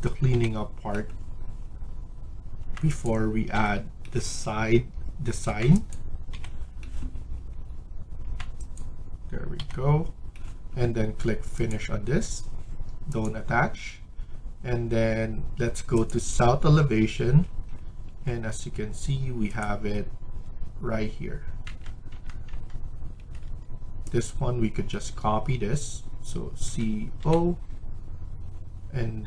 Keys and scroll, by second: 0.3 Delete, 2.6 Tab, 3.5 Delete, 5.3 Tab, 6.3 Delete, 8.1 Tab, 9.5 Delete, 17.9 Escape, 20.3 Escape, 21.6 Tab, 22.0 Tab, 22.4 Tab, 23.1 Escape, 23.3 Escape, 26.6-27.1 typing.